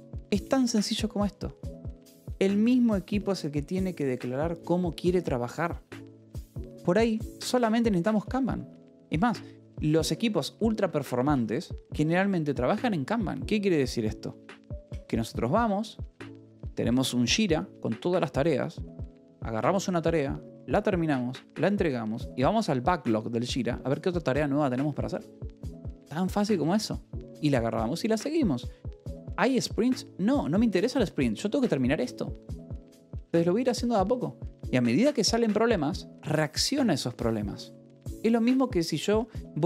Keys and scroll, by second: 0.9 shift+v, 2.1 Escape, 9.9 shift+c, 10.0 Escape, 10.7 a, 11.6 Escape, 12.5 shift+v, 14.4 Escape.